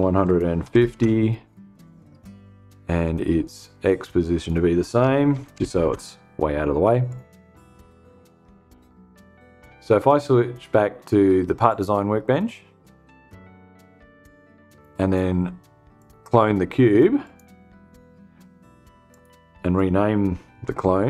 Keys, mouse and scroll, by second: 0.1 0, 0.4 Tab, 3.4-4.1 drag, 4.2-5.5 typing, 6.5 click, 7.7 click, 11.1 click, 12.6 click, 14.2 click, 15.4 click, 16.7 click, 18.6 click, 20.0 F2.